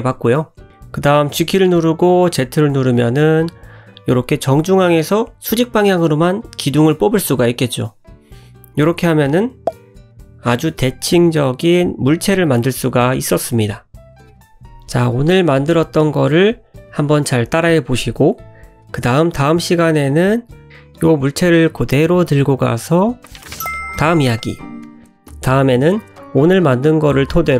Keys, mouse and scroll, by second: 1.7 middle click, 4.0-4.3 scroll up 4, 4.5 middle click, 5.5 g, 6.8 click, 8.9 /, 9.9 middle click, 10.6 scroll up 1, 11.1 shift+middle click, 12.5 scroll down 1, 13.3 scroll down 1, 15.2 middle click, 17.4-17.8 scroll down 2, 18.7 shift+middle click, 19.8 click, 20.3 shift+click, 21.2 scroll down 1, 23.0 g, 26.0 ctrl+z, 26.0 middle click, 26.0 scroll down 1, 26.2 g, 27.3 ctrl+z.